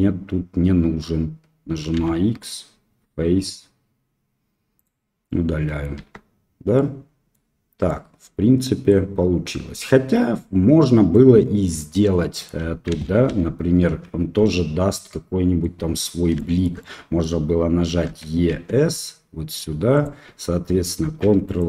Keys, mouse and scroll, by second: 1.9 x, 5.2 middle click, 5.9 Tab, 6.7 middle click, 7.8-8.9 middle drag, 10.7 middle click, 11.6 middle click, 13.0 ctrl+z, 14.4-15.6 drag, 16.3 shift+click, 16.8 click, 18.2 e, 21.0 ctrl+r.